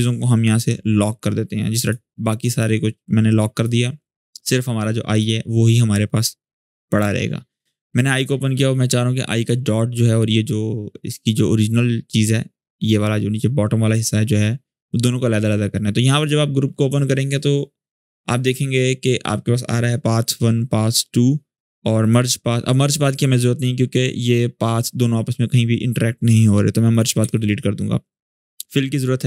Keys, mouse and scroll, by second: 0.9-1.9 drag, 6.7 click, 15.9 click, 21.7 click, 23.9 scroll up 1, 26.6 click.